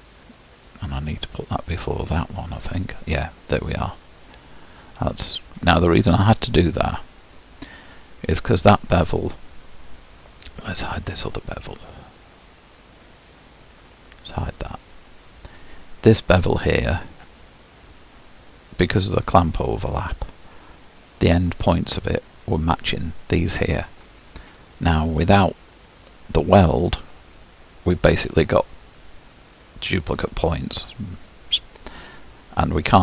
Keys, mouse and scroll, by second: 0.1-3.1 drag, 3.1-4.1 scroll up 4, 4.1-14.5 middle drag, 14.5-21.6 drag.